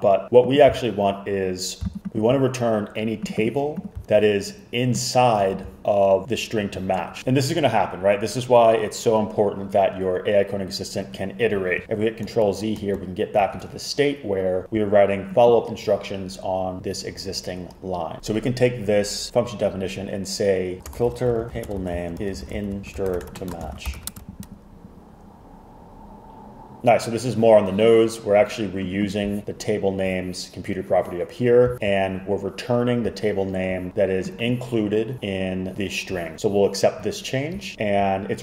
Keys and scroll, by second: 11.8 super+z, 12.3 super+z, 12.9 super+z, 20.6-24.5 typing.